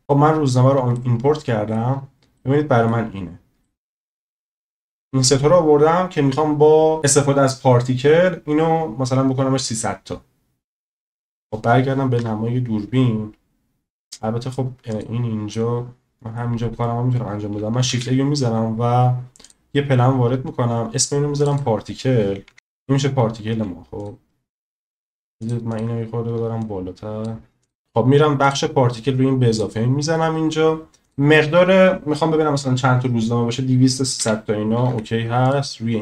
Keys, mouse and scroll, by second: 0.9-1.8 middle drag, 2.4-2.9 middle drag, 3.6-4.0 shift+middle drag, 4.4-5.1 middle drag, 11.0-11.4 middle drag, 12.2 KP_0, 14.1-14.5 middle drag, 15.5-16.4 middle drag, 17.9 shift+a, 21.6 click, 23.5 s, 25.4 shift+click, 25.7 shift+click, 26.6 click, 27.6 click, 29.5 click, 31.2-35.5 drag, 34.9 0.